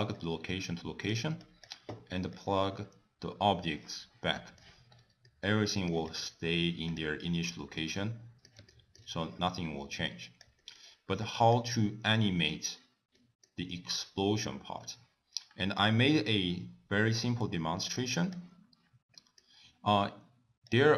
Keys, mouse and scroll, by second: 0.3 click, 1.5 click, 2.4 click, 4.5 middle click, 5.0 scroll down 2, 5.3 middle click, 6.2 click, 7.0 click, 7.9 middle click, 8.8 shift+middle click, 10.2 click, 10.7 middle click, 11.3 click, 12.0 middle click, 12.4-12.8 scroll down 2, 13.3 middle click.